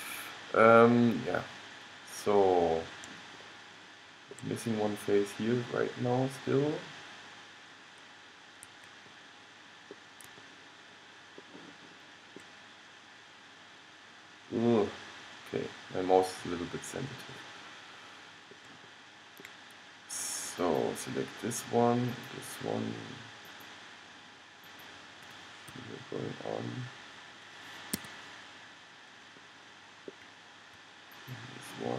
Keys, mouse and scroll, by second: 0.9 middle click, 1.2 middle click, 2.0 middle click, 2.7-13.4 middle drag, 13.8-20.8 middle drag, 20.8-26.8 drag, 25.9 g, 28.6 middle click, 31.3-31.9 drag.